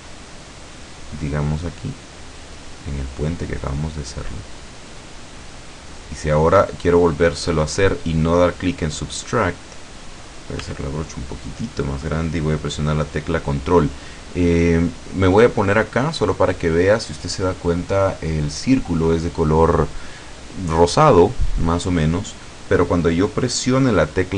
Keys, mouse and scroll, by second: 0.0-1.5 middle drag, 1.7-5.3 drag, 5.5-7.2 middle drag, 10.7 f, 11.7 click.